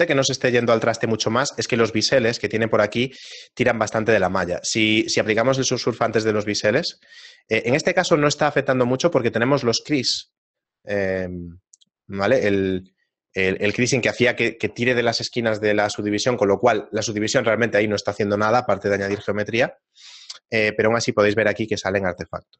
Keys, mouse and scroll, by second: 5.5 click, 6.4 shift+middle click, 6.9-7.3 scroll down 2, 7.3 shift+middle click, 12.7 click, 20.5 shift+middle click, 20.9 ctrl+middle click.